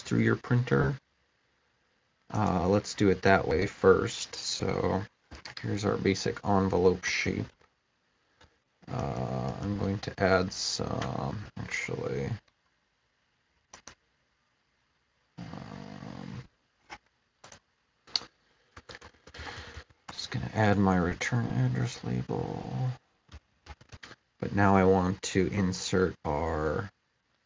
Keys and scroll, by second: 7.0 typing, 8.2-10.2 typing, 18.5-20.1 typing, 22.9-24.3 typing.